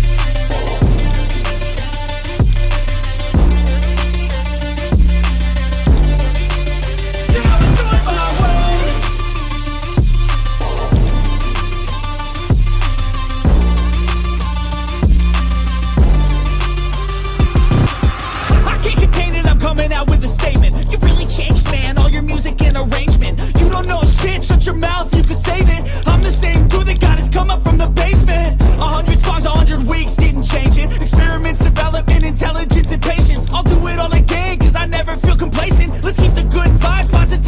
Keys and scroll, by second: 3.8 x, 5.2 ctrl+z.